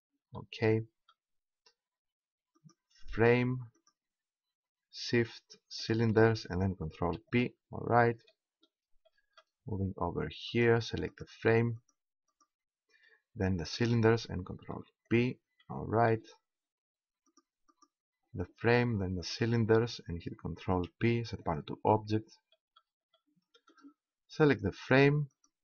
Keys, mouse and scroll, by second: 2.6-5.4 right drag, 5.8-7.4 right drag, 7.0 ctrl+p, 10.5-14.7 drag, 14.7 ctrl+p, 17.2 click, 17.8-20.6 right drag, 20.6 ctrl+p, 22.6 middle click, 23.3 middle click, 24.1 click, 24.9-25.6 right drag.